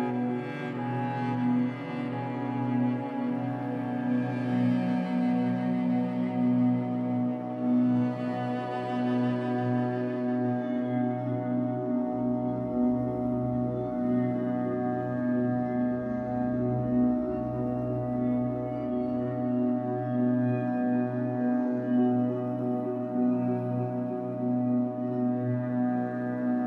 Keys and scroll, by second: 0.0 3, 1.8 shift+Tab, 2.2 Escape, 3.5 b, 5.4 b, 11.1 Escape, 11.4 3, 12.2 shift+Tab, 12.5 Escape, 21.3 shift+Tab, 22.8 Escape, 23.1 3, 23.9 shift+Tab, 24.2 Escape.